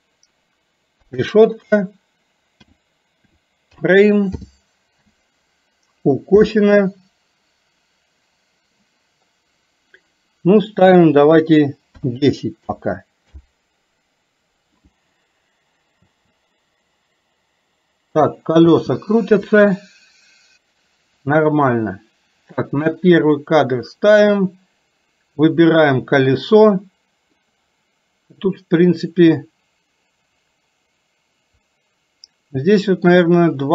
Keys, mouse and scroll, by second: 16.1 space, 19.0 space, 23.3 click, 25.8 click, 27.4-33.0 middle drag.